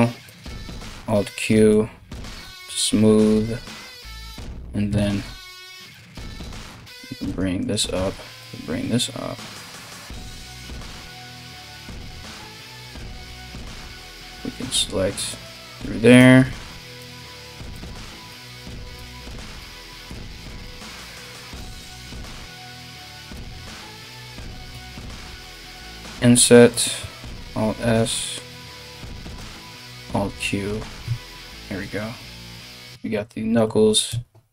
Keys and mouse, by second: 0.4 alt+q, 0.5 alt+q, 4.5 1, 5.2 click, 5.3-7.2 middle drag, 6.3 g, 7.2 click, 7.3-9.1 middle drag, 7.5 g, 9.1 click, 9.2-34.5 middle drag, 9.2 g, 12.0 3, 12.7 right click, 13.5 right click, 14.2 right click, 14.9 alt+shift+right click, 16.1 c, 26.7 alt+s, 29.5 alt+q, 30.6 Tab, 33.7 Tab.